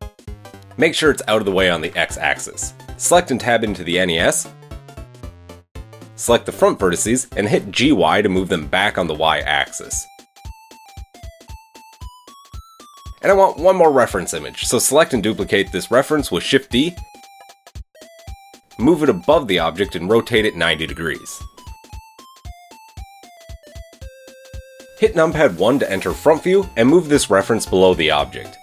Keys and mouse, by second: 0.1-3.6 middle drag, 1.6 g, 3.6 click, 3.7-6.4 middle drag, 4.4 KP_3, 5.4 Tab, 5.5 Tab, 6.1 a, 6.2 a, 6.4 c, 6.9-11.2 drag, 7.9 g, 11.7-13.4 middle drag, 12.9 Tab, 13.4 click, 13.5-14.7 middle drag, 14.7 click, 14.9-16.7 shift+middle drag, 16.5 KP_3, 17.8-27.1 shift+middle drag, 18.7 shift+d, 20.5 r, 23.3 KP_7, 25.3 KP_1, 27.1 g.